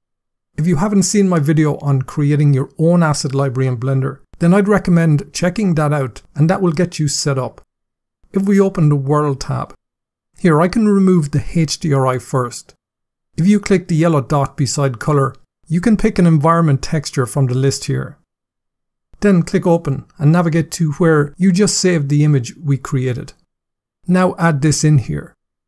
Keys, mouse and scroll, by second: 9.5 click, 10.9 click, 13.9 click, 17.1 click, 19.5 click, 23.3 click, 24.4 click.